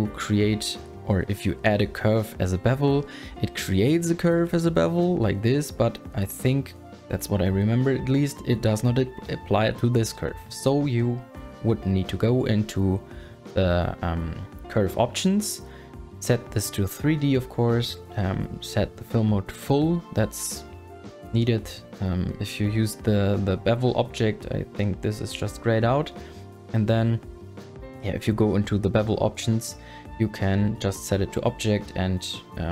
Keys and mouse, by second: 1.1 super+click, 3.0 click, 5.7 click, 26.9-29.2 super+drag.